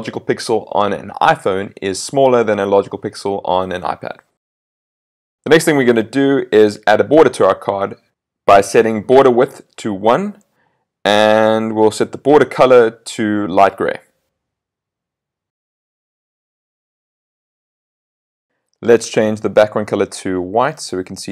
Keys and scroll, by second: 16.8 super+s, 20.7 super+s.